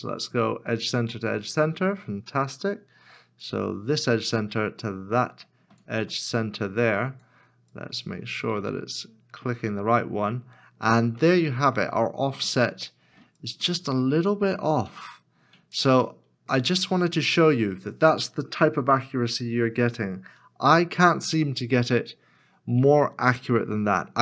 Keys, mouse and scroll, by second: 4.4 ctrl+click, 7.9 ctrl+click, 11.3 middle click, 14.0 middle click, 14.2 ctrl+click, 16.2 middle click.